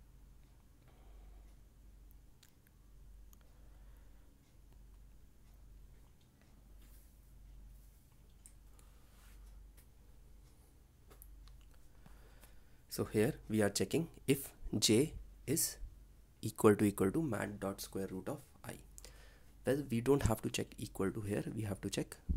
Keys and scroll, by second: 2.1 ctrl+v, 6.0 ctrl+s.